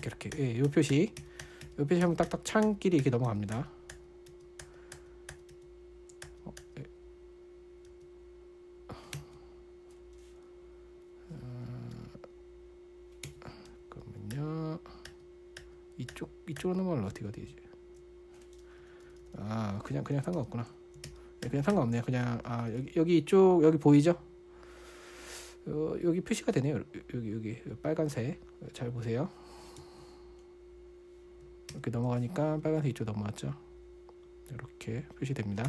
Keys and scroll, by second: 0.2 super+[, 0.4 super+], 0.8 super+[, 1.1 super+], 1.3 super+[, 1.6 super+], 1.8 super+[, 2.0 super+], 2.4 super+[, 3.0 super+[, 3.7 super+], 4.0 super+[, 4.7 super+], 5.0 super+[, 5.7 super+[, 5.9 super+], 6.6-7.0 typing, 8.0-9.6 typing, 12.4 typing, 13.7 typing, 14.1 super+], 14.8 super+[, 15.5 super+[, 16.0 super+[, 17.5 super+], 19.2-20.1 typing, 20.8 super+], 21.5 super+], 21.9 super+[, 22.1 super+[, 22.6-23.7 typing, 30.2 Escape, 32.1 super+].